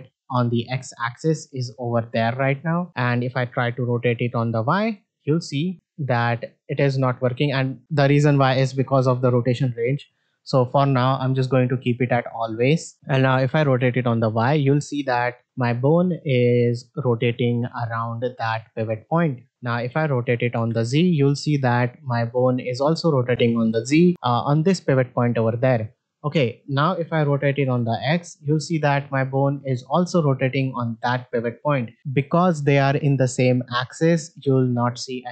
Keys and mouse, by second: 2.8 middle click, 3.9 middle click, 4.6 r, 5.7 r, 9.9-12.2 drag, 13.2 r, 19.7-20.1 middle drag, 20.5 r, 25.7 middle drag, 27.6 r.